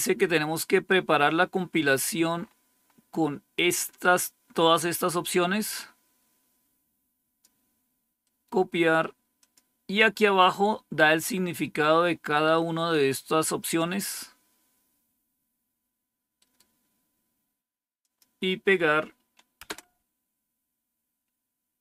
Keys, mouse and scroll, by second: 0.0-1.1 scroll down 1, 1.1-2.3 scroll down 1, 2.3-4.6 scroll up 1, 4.6-8.1 drag, 8.1-9.2 right drag, 9.3 click, 10.1-12.0 scroll down 1, 12.0-13.8 scroll up 2, 13.8-15.0 scroll down 2, 16.3 right click, 17.9-19.5 drag, 19.5 Return.